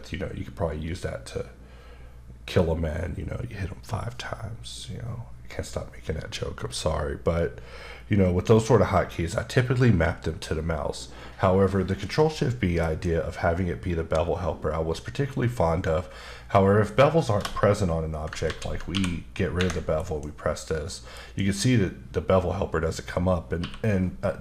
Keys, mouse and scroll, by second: 12.8 ctrl+shift+b, 18.5 ctrl+z, 19.5 Escape, 20.0 ctrl+shift+b, 21.3 b, 24.2 click.